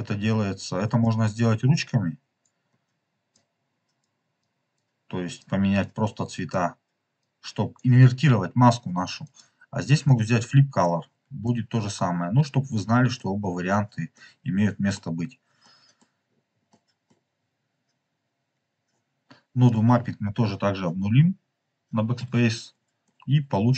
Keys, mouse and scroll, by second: 1.7 click, 3.3 click, 4.3 click, 5.3-6.5 drag, 7.1 click, 9.2-11.0 drag, 11.4-13.2 middle drag, 13.2-13.7 scroll up 2, 13.7 scroll down 2, 14.0 middle click, 15.5 middle click, 16.2-16.6 scroll down 3, 16.6 middle click, 17.3 scroll up 3, 19.6 click, 22.3 BackSpace, 22.9-23.7 middle drag.